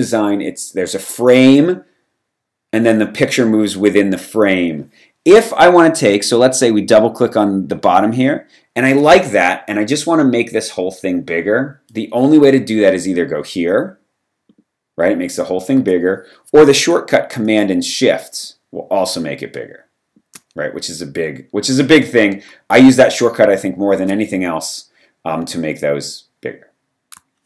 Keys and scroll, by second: 15.8 super+z.